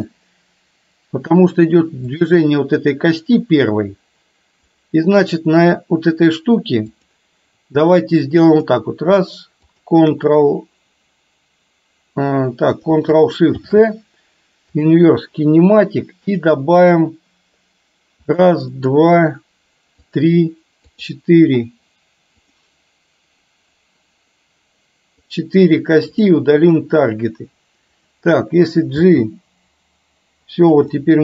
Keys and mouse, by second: 2.2 click, 4.9 click, 7.0 click, 8.6 click, 13.6 ctrl+shift+c, 16.4 click, 18.4 click, 18.9 click, 20.1 click, 25.4 click, 26.1 click, 28.1 click, 29.1 g, 31.0 middle click.